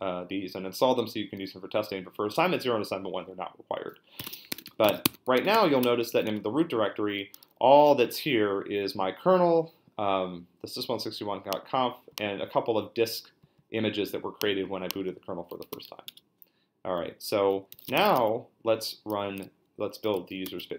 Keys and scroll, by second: 3.9-6.6 typing, 15.3-16.4 typing, 17.5-18.6 typing, 20.4 space.